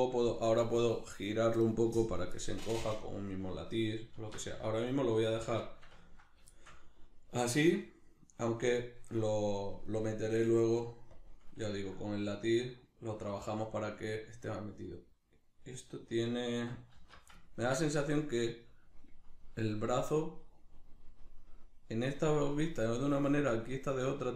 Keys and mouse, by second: 9.9 right click, 11.1 click, 11.7-24.3 ctrl+middle drag, 17.0 alt+q.